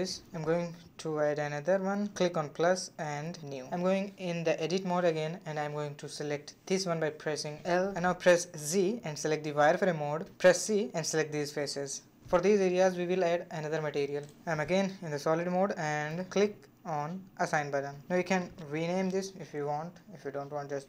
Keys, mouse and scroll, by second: 0.0-2.7 drag, 2.7 Tab, 3.5 a, 3.7 a, 5.2 3, 5.9 l, 7.2 KP_3, 8.3 shift+middle click, 8.9 z, 10.3 c, 14.1 z, 14.5-16.7 middle drag, 16.7-17.1 scroll down 2, 17.1-18.5 middle drag, 18.5-20.8 drag.